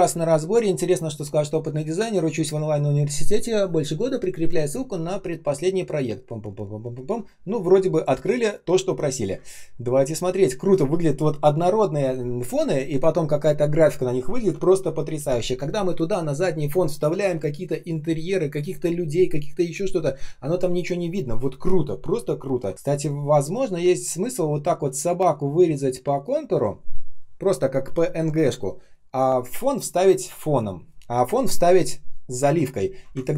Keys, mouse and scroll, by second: 9.3 space, 9.7 space, 9.8 space, 22.7 ctrl+shift+3, 33.1 ctrl+click.